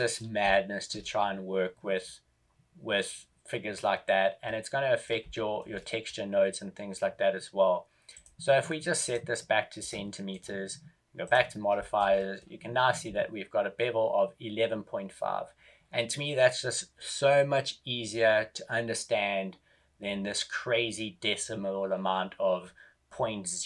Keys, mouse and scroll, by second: 0.4 shift+middle click, 1.0-2.4 scroll up 1, 5.2 shift+middle click, 5.7 middle click, 8.0 click, 11.7 click, 11.7 right click, 11.7 shift+middle click, 12.1 middle click.